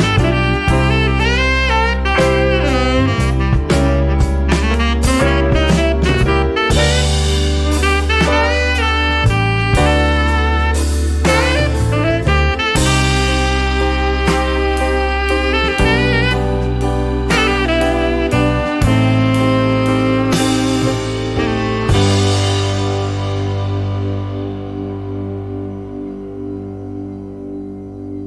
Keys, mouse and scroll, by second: 3.0 0, 3.9-4.2 scroll down 2, 5.1-6.2 scroll up 2, 6.2-6.6 scroll down 1, 7.1-7.7 scroll up 2, 8.6 scroll down 1, 10.5 scroll up 1, 14.9-15.4 scroll down 2, 15.7 scroll up 2, 22.9 click, 24.3-26.6 drag.